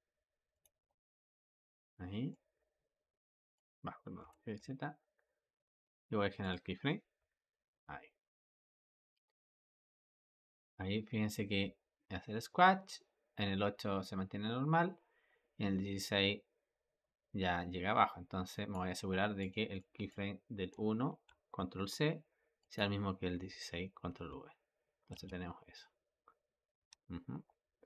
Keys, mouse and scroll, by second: 2.2-4.1 drag, 4.1 g, 7.1 i, 8.7-11.7 drag, 19.3 click, 19.7 click, 21.1 ctrl+c, 22.5-23.8 drag, 23.8 ctrl+v, 25.0 space, 27.2 Escape.